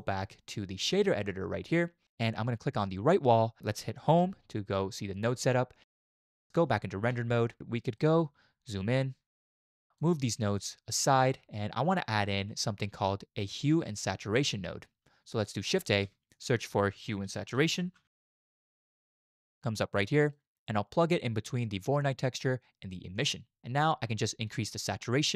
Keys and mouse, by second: 1.1 click, 4.1 Home, 6.6 z, 8.2 click, 9.5 click, 9.7-10.0 drag, 10.7 click, 15.9 shift+a, 23.6 shift+click, 23.7-24.9 shift+middle drag, 23.8 shift+click, 24.9-25.3 drag.